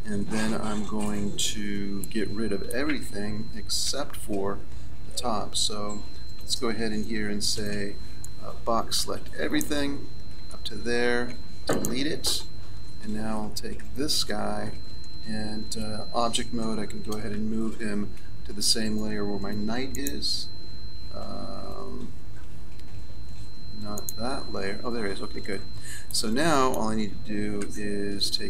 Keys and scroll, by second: 3.9 z, 5.1 a, 7.5 b, 11.3 Delete, 13.8 Tab, 17.3 m, 27.6 z.